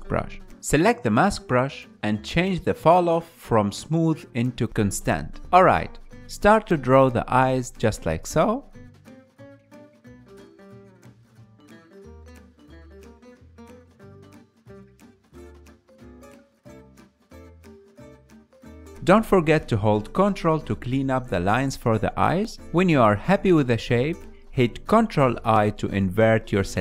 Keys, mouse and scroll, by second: 0.7-7.6 drag, 7.6 ctrl+z, 8.3 f, 9.5-11.8 drag, 11.8-13.0 ctrl+middle drag, 13.0-14.8 drag, 14.8 middle click, 15.0 click, 15.5 middle click, 15.8-17.4 drag, 17.7 middle click, 17.9 ctrl+click, 18.3 ctrl+z, 18.4 ctrl+click, 18.9-19.9 middle drag, 19.9 KP_1, 20.8-22.5 ctrl+middle drag, 22.5-24.7 drag, 24.7-25.4 middle drag, 25.4 ctrl+i.